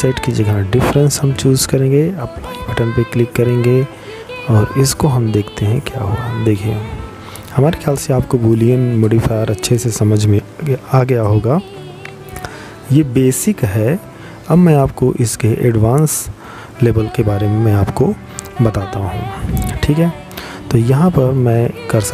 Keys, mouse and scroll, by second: 11.5 middle click, 18.4 click, 19.3 click, 21.6 click.